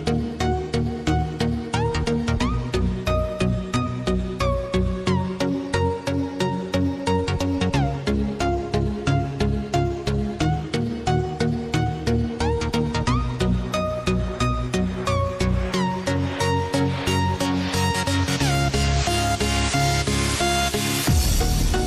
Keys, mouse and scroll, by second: 0.3 click, 3.5 click, 5.7-6.4 scroll up 1, 7.0 ctrl+b, 9.9 alt+shift+click, 11.5 ctrl+z, 12.8 click, 14.7 alt+shift+click, 16.2 alt+shift+click, 17.5 ctrl+b.